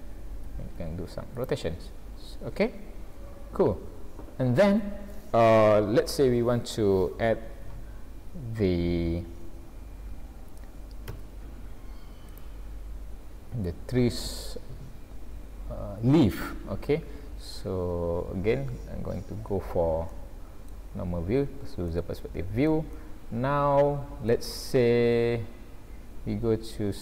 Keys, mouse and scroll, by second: 0.6 r, 1.7-2.4 scroll down 5, 2.9 scroll down 1, 3.6-4.3 scroll down 2, 4.4-5.0 scroll up 2, 8.1 scroll up 2, 9.1-9.6 scroll up 1, 11.1 z, 12.8-13.7 scroll down 6, 13.6-14.1 scroll up 5, 16.5 scroll down 1, 16.6-17.7 scroll down 8, 17.8-18.1 scroll up 1, 19.0 ctrl+alt+q, 19.7 scroll down 1, 20.1 middle click, 20.9-21.5 scroll down 2, 21.5 scroll up 1, 21.9 shift+middle click, 22.9 middle click, 25.1 scroll down 2, 25.7-26.0 scroll up 2.